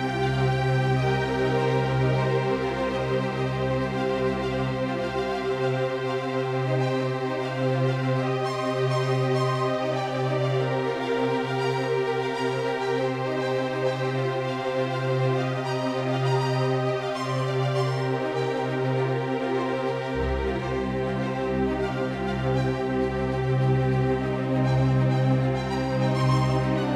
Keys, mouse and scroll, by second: 15.1 Escape, 16.7-18.7 middle drag, 17.2 a, 18.7 c, 24.4 a, 25.4 c.